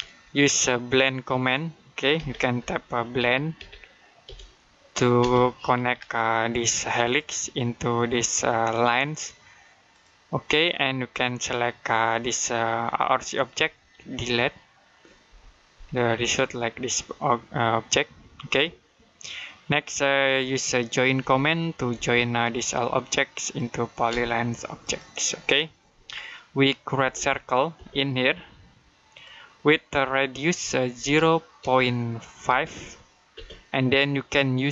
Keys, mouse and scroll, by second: 0.1 middle click, 0.8-2.0 scroll up 1, 2.0-5.0 typing, 6.9 click, 9.7 click, 12.9 click, 15.1 Delete, 16.1 shift+middle click, 21.0 j, 21.8 space, 22.4 click, 23.9 space, 24.7 click, 25.7 Escape, 26.1 middle click, 26.8 c, 27.6 space, 29.0 click, 30.8 typing, 32.0-33.2 typing, 34.5-34.7 typing.